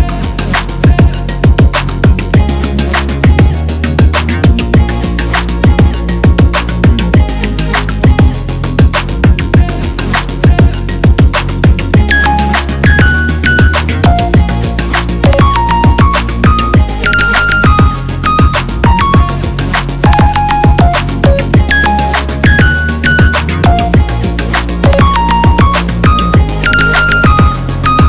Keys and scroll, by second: 1.8 ctrl+7, 9.1 x, 16.9 ctrl+d, 22.2-23.1 typing, 24.5 ctrl+z.